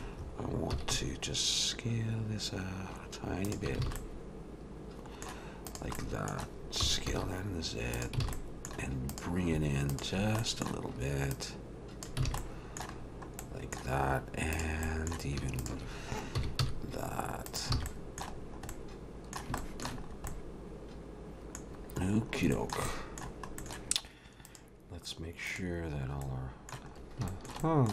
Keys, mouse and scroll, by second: 0.7 s, 3.9 alt+a, 4.0 middle click, 5.7 click, 6.0 middle click, 6.8 s, 8.2 alt+a, 8.3 middle click, 9.1 click, 9.9 shift+click, 10.4 middle click, 11.3 click, 12.3 alt+a, 12.4 middle click, 13.0-14.1 scroll down 3, 13.4 middle click, 14.1-14.4 scroll up 3, 14.5 click, 14.8 middle click, 15.6 shift+click, 16.3 s, 17.7 alt+a, 18.3 middle click, 18.3-19.0 scroll down 3, 18.7 middle click, 19.6 shift+middle click, 20.1-20.5 scroll up 2, 20.3 middle click, 21.7-22.4 scroll down 7, 22.5 shift+middle click, 22.9 middle click, 23.4 scroll up 2, 23.8 middle click, 23.8 scroll down 1, 24.5 click, 26.2 middle click, 26.9-27.3 scroll up 2, 27.3 shift+middle click, 27.6 middle click.